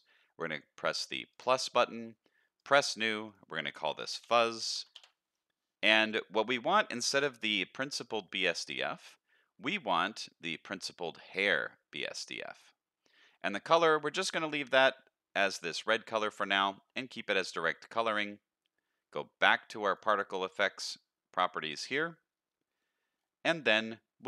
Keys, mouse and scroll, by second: 0.0-1.3 scroll up 1, 1.3 click, 2.6 click, 3.2-4.9 drag, 4.7 z, 7.0-7.8 scroll down 2, 7.8-12.2 drag, 16.5-17.9 scroll down 1, 17.9-18.4 scroll down 1, 19.9 click, 23.1-24.1 scroll down 3, 24.1-24.2 scroll down 3.